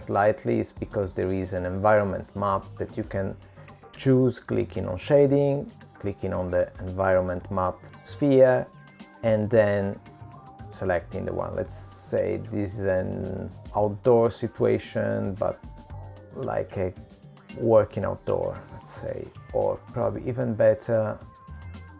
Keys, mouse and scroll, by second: 0.4 middle click, 7.4 click, 16.8 middle click, 20.9-21.3 scroll up 2, 21.3-21.8 scroll down 2, 21.8 middle click.